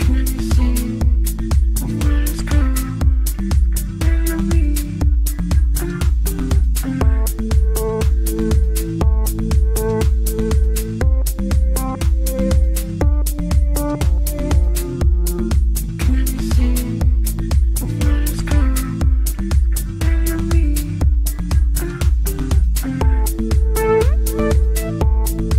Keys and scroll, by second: 0.3 F3, 4.9 Delete.